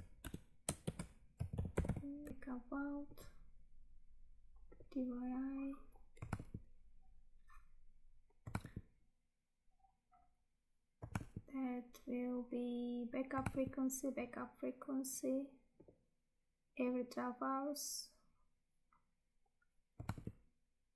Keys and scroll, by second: 2.3 Tab, 6.4 Tab, 8.6 Tab, 11.2 Tab, 13.5 Tab, 20.2 Tab.